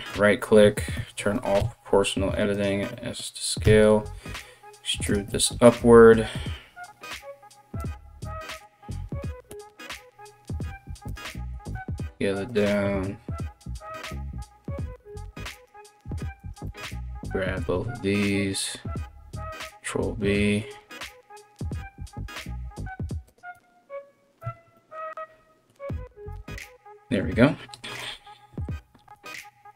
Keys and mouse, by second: 0.5 o, 1.2 s, 3.4 e, 5.9 g, 11.3 s, 14.3 ctrl+r, 15.4 alt+right click, 16.0 alt+shift+right click, 17.2 ctrl+b, 24.0 Tab, 25.9 KP_1, 28.7 z.